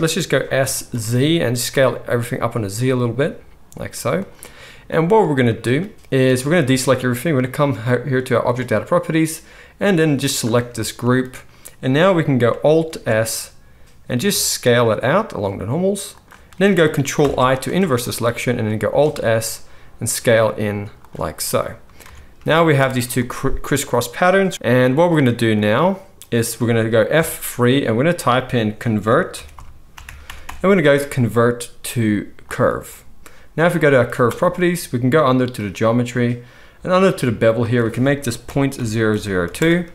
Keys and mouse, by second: 0.5 s, 4.3-8.4 middle drag, 6.2 alt+a, 8.4 click, 8.5-10.3 middle drag, 10.3-16.2 drag, 12.8 alt+s, 16.2-18.6 shift+middle drag, 17.1 ctrl+i, 18.6 alt+click, 18.8 alt+s, 18.8-24.5 alt+middle drag, 22.0 Tab, 22.8 z, 24.5-33.9 drag, 24.7 z, 27.1 F3, 33.9-37.6 middle drag, 37.6-39.9 drag, 39.1 0.